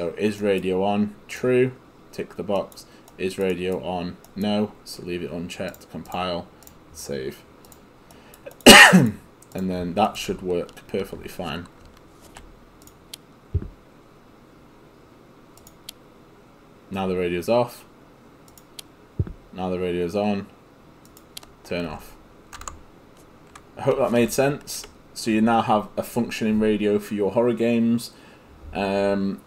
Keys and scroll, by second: 10.3 w, 11.9 ctrl+w, 21.9 ctrl+s, 22.6 ctrl+s, 24.0 s.